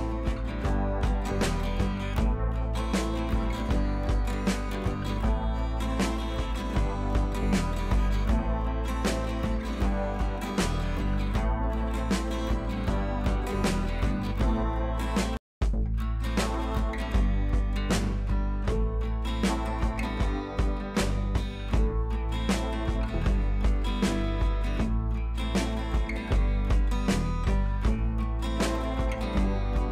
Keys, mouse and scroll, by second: 0.8 scroll down 1, 3.0 scroll down 1, 5.1 scroll down 1, 10.2-12.5 scroll down 1, 15.3 click, 17.5 scroll down 1, 18.4 click, 21.2 scroll up 1, 23.5 scroll up 1, 27.7 click.